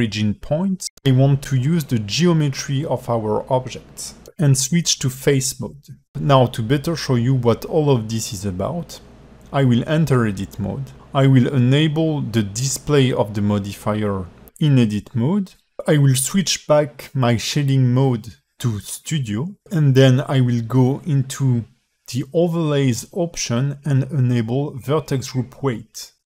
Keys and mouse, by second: 5.9 click, 7.6-8.6 alt+middle drag, 9.3-11.0 drag, 11.0 Tab, 12.6 click, 13.1 click, 13.7 click, 14.1 click, 19.8-26.2 drag.